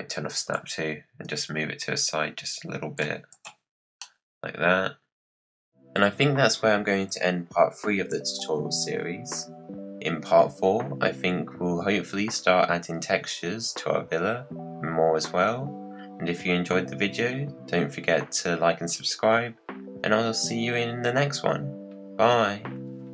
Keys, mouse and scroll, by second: 0.3 click, 1.2 click, 3.3 click, 4.0-7.6 middle drag.